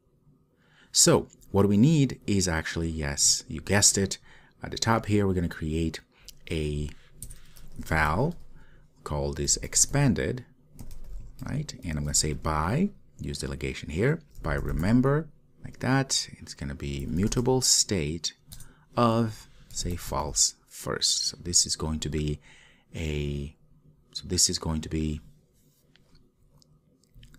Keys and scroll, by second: 15.8 Return.